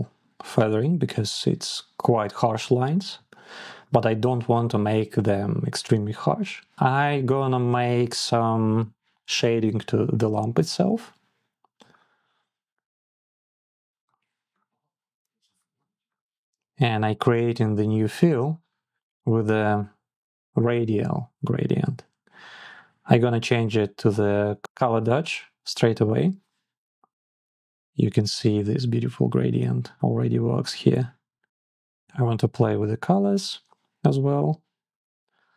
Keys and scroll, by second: 0.3 Down, 0.6 Up, 1.1 Down, 1.3 Up, 1.9 Down, 3.4 Down, 4.9 Up.